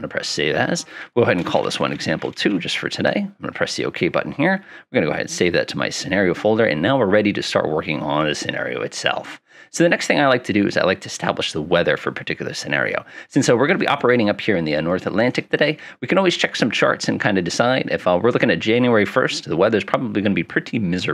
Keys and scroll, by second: 1.5-2.5 typing.